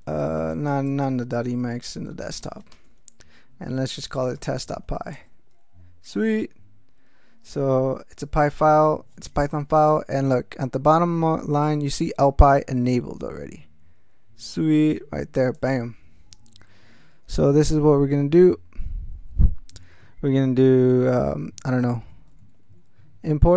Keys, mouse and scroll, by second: 0.5 alt+BackSpace, 2.0-5.2 typing, 15.5 click, 21.6-23.1 typing.